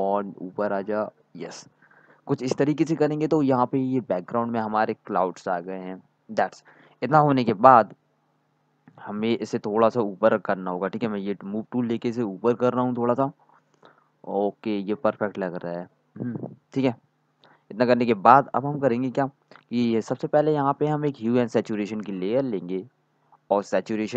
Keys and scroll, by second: 4.6-6.5 typing.